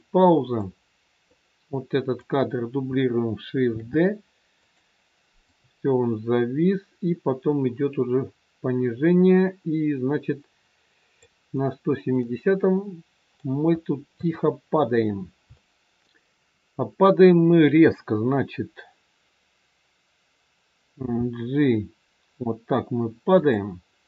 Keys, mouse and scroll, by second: 0.6 click, 1.7 click, 3.7 shift+d, 5.4 click, 11.7-12.0 scroll down 1, 12.0 middle click, 14.1 KP_3, 15.1 scroll down 1, 15.5 shift+middle click, 20.9 g.